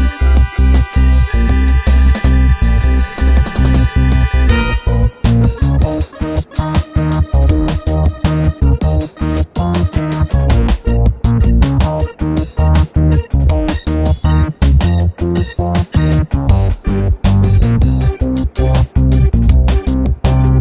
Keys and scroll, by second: 17.7 super+-, 20.1 space.